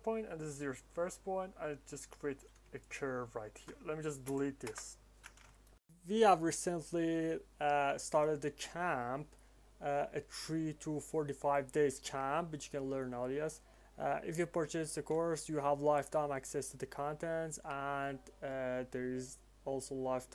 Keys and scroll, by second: 4.2 Delete, 4.5 Return.